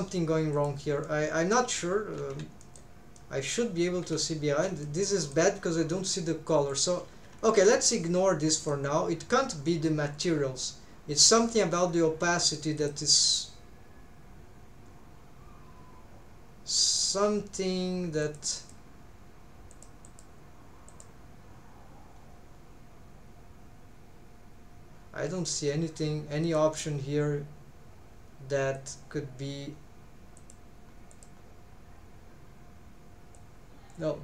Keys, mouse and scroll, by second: 0.6 click, 1.0 middle click, 2.2 alt+z, 2.6 middle click, 3.2 middle click, 4.1 alt+z, 4.5 alt+z, 4.8 middle click, 6.7 click, 7.1 alt+z, 7.4 scroll down 1, 7.9 middle click, 11.4-12.0 scroll down 2, 12.8-18.3 drag, 18.6 click, 19.7 click, 20.1 click, 20.9-26.4 drag, 28.7-34.2 drag.